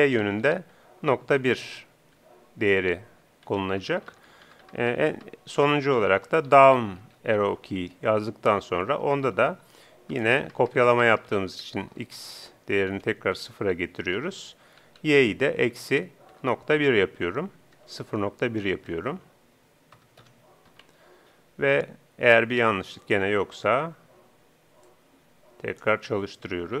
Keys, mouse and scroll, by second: 25.1-26.8 drag.